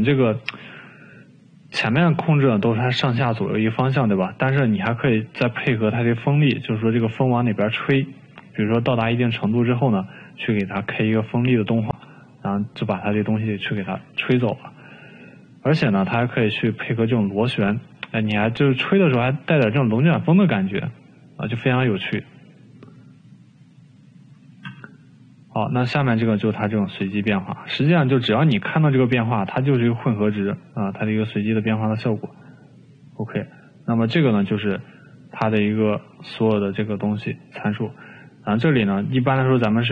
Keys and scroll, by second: 1.5 ctrl+z, 10.3 ctrl+z, 15.7 ctrl+z, 20.7 ctrl+z, 24.7 ctrl+z.